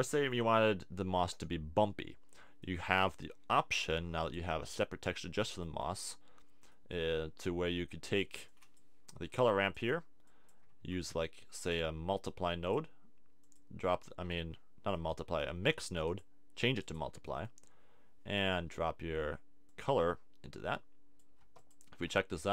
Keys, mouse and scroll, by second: 10.3 click, 10.7 shift+a.